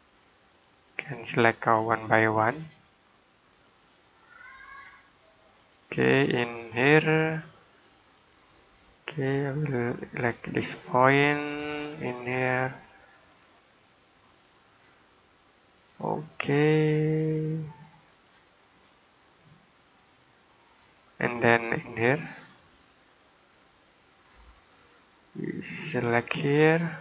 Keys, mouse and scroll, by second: 20.7 middle click, 22.2 click.